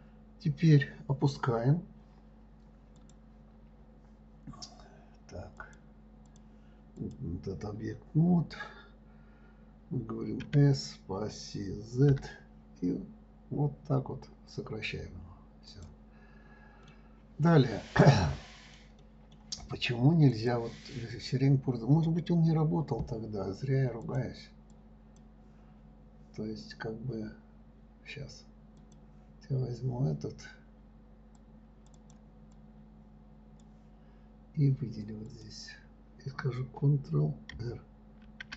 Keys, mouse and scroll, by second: 3.4 click, 6.0-7.5 drag, 17.2 middle click, 17.9-20.7 middle drag, 20.7 click, 24.4-27.4 drag, 29.2 click, 31.7 click, 32.9-35.8 drag.